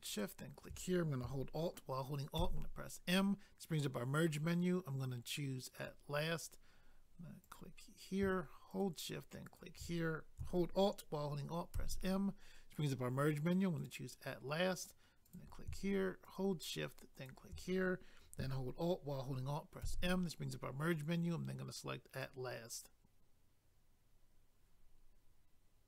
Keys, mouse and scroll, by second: 0.0 shift+click, 2.3 alt+m, 5.8 click, 7.4 click, 7.6 click, 8.7 shift+click, 8.8 shift+click, 9.5 shift+click, 9.6 shift+click, 11.8 alt+m, 13.8 click, 13.9 click, 15.2 click, 15.3 click, 16.2 shift+click, 16.4 shift+click, 17.1 shift+click, 17.3 shift+click, 19.8 alt+m, 22.1 click, 22.2 click.